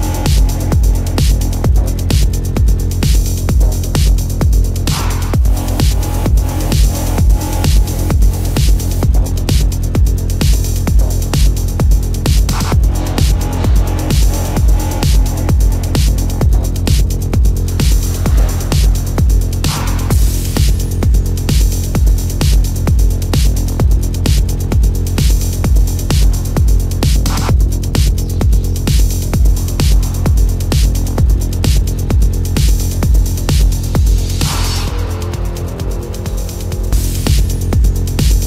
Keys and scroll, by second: 1.4 ctrl+-, 2.0 ctrl+-, 2.1 space, 2.4 ctrl+-, 4.0 space, 8.2 ctrl+=, 9.0 ctrl+=, 9.3 space, 9.6 ctrl+=, 11.6 space, 18.0 space, 22.0 space, 24.7 ctrl+-, 25.3 space, 27.4 ctrl+-, 29.1 ctrl+=, 29.4 space, 33.8 space, 36.1 space, 37.5 space, 38.3 ctrl+alt+z.